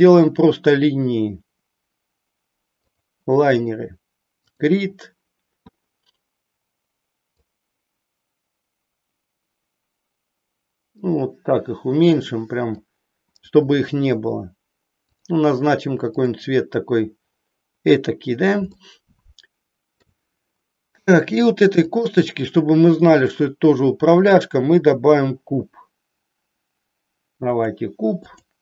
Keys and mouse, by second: 4.4 click, 7.4-12.8 drag, 16.0 click, 18.8-20.1 shift+middle drag, 21.8-22.8 drag, 24.0-27.8 drag, 28.4 click.